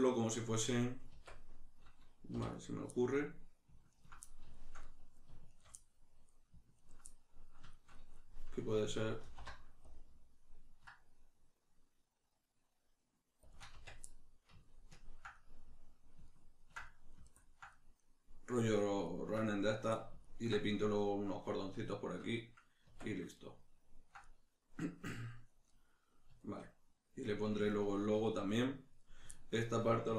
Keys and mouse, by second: 1.1 Tab, 2.5 right click, 3.9 ctrl+right click, 4.3-5.5 shift+middle drag, 5.5 shift+right click, 5.8-6.8 middle drag, 6.8 ctrl+right click, 7.1-13.5 middle drag, 9.3 alt+e, 13.5 shift+click, 13.7 Tab, 14.1-30.1 middle drag, 22.9 Tab.